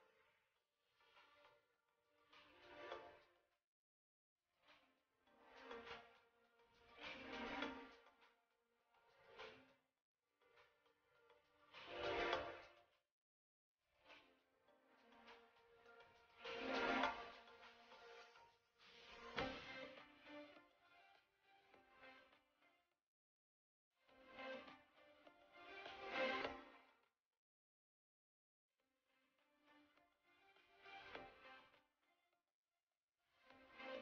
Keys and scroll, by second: 0.1 shift+space, 10.5 ctrl+z, 11.3 ctrl+z, 14.7 ctrl+z, 15.5 shift+space, 17.8 Delete, 32.1 shift+space.